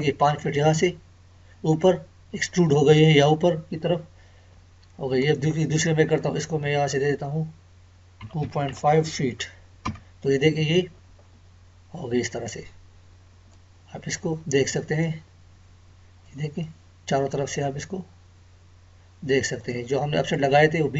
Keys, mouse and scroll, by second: 5.2 click, 13.5-19.2 middle drag, 19.2 right click, 19.4 right click, 20.3 click, 20.8-20.9 scroll up 1.